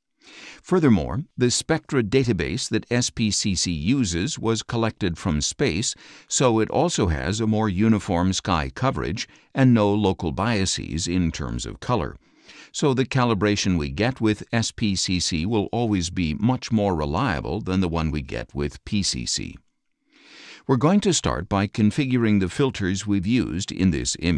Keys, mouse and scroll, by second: 21.9 click.